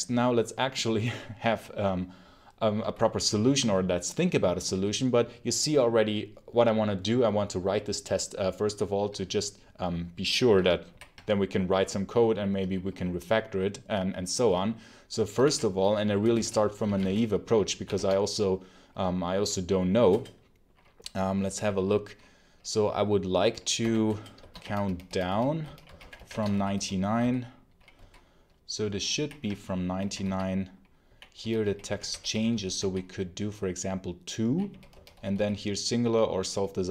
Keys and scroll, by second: 15.2 ctrl+l, 16.2-17.7 typing, 17.8 Tab, 20.0 Return, 23.7-27.8 typing, 24.0 Return.